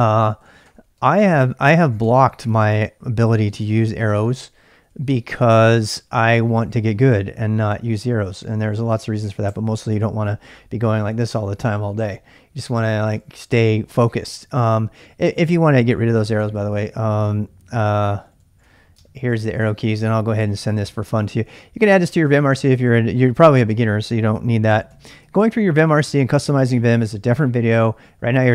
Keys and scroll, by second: 0.0-5.5 typing, 4.1 Return, 6.0 Down, 6.1 Down, 6.4 Up, 6.6 Up, 6.7 Up, 6.8 Up, 7.1 Right, 7.2 Right, 7.5 Left, 7.8 Up, 8.0 Down, 8.3 Up, 8.6 Right, 8.6 Up, 8.9 Up, 9.1 Left, 9.2 Right, 9.2 Left, 9.4 Left, 13.0-14.6 typing, 15.8-25.4 typing, 19.3 ctrl+[, 19.4 ctrl+j.